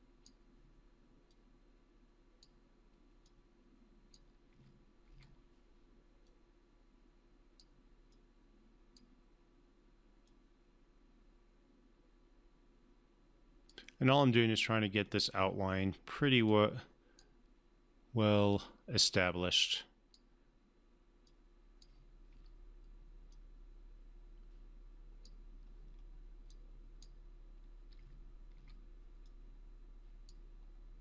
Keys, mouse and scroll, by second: 4.5 e, 5.0 r, 6.2 click, 6.3-7.8 drag, 16.4-17.4 drag, 22.3 w, 23.3-25.5 drag, 27.9-29.0 typing, 29.2-30.5 drag.